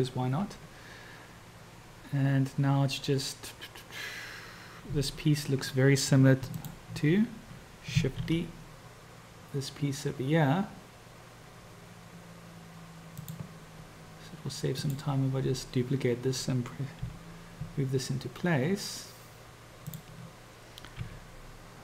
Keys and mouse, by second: 6.7 shift+click, 8.2 shift+d, 14.7 click, 17.2 g, 21.0 r.